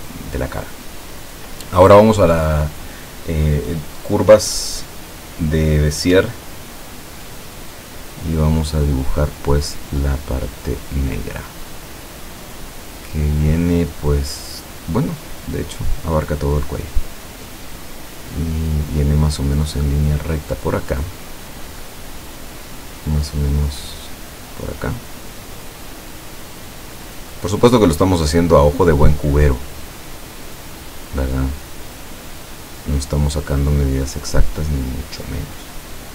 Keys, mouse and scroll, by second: 4.0 click, 6.4-6.8 ctrl+scroll up 2, 11.8 click, 15.5 scroll down 2, 17.6 click, 26.0 click, 27.1-28.3 drag, 33.0 click.